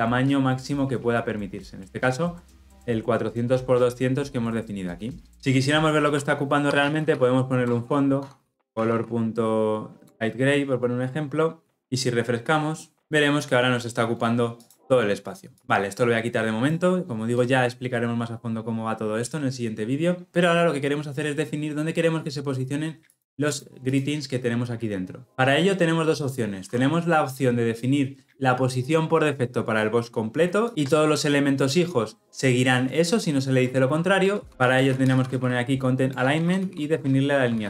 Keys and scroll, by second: 7.6 Return, 36.0 Return.